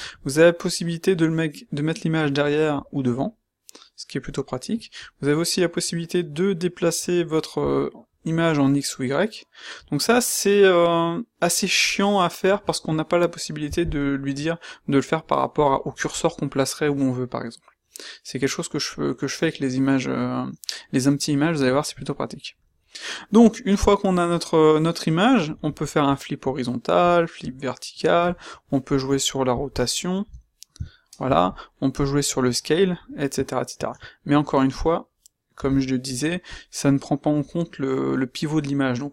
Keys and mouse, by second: 22.1-24.0 middle drag, 33.7 ctrl+z, 35.5 g.